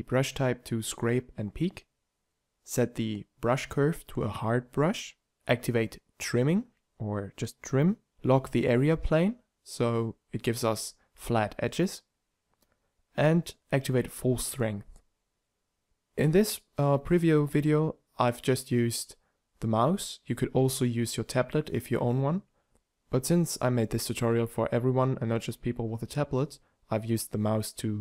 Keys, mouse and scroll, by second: 1.0 t, 8.9 f, 10.4 shift+f, 12.6 f.